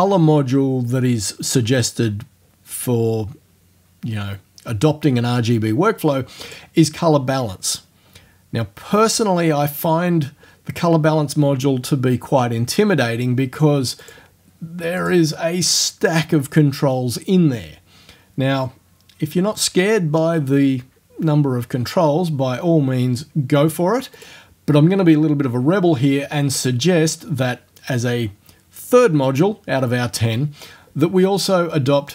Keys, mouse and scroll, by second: 6.5 click, 14.1 click, 15.0 click, 24.2 click, 26.6 click.